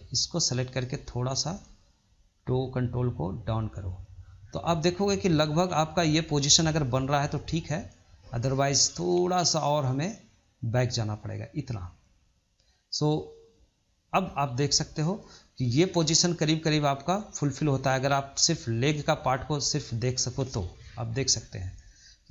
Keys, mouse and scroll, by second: 0.3 click, 1.6 click, 2.6 click, 4.1 scroll down 2, 4.7-5.4 shift+middle drag, 5.4-5.8 scroll up 2, 5.8-7.1 shift+middle drag, 7.1 click, 9.2 click, 18.4 scroll down 4, 18.4-20.0 middle drag, 20.0-20.6 scroll up 1, 20.6 KP_3, 21.2-21.6 scroll up 2, 21.6 shift+middle click.